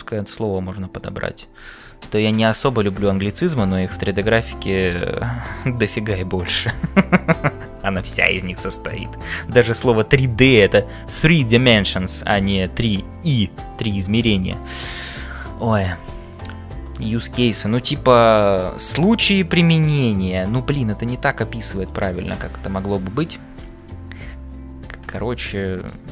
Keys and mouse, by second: 0.9 click, 4.0 click, 4.6 g, 14.8 e, 15.1 e.